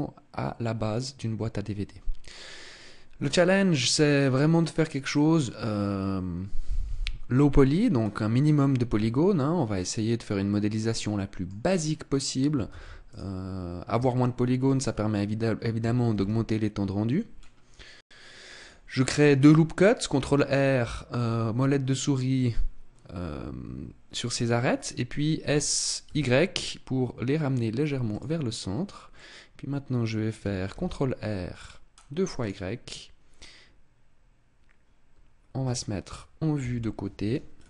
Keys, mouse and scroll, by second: 8.0-8.9 scroll up 2, 8.9 Tab, 9.7 middle click, 11.7 scroll up 2, 12.7 ctrl+s, 14.1 shift+middle click, 16.1 ctrl+r, 18.5 click, 25.3 s, 28.1 click, 28.5-29.0 scroll up 2, 29.0 middle click, 30.6 ctrl+r, 32.4 click, 36.5 KP_3, 37.4-37.6 scroll down 4.